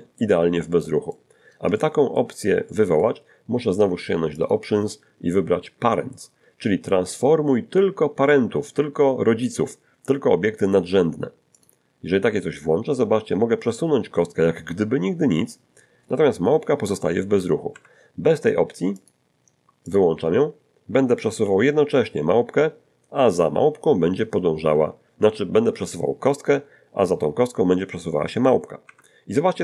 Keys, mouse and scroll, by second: 0.7 click, 1.7 shift+click, 2.7 shift+click, 4.4 click, 11.6 click, 13.7 g, 17.7 Escape, 19.0 click, 19.9 click, 21.4 g, 28.9 Escape.